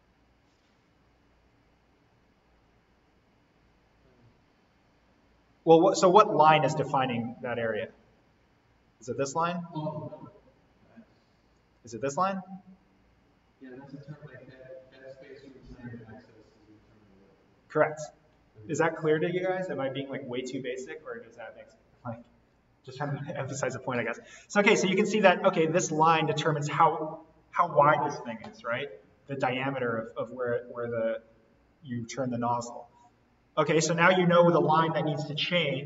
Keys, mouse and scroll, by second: 11.5 click.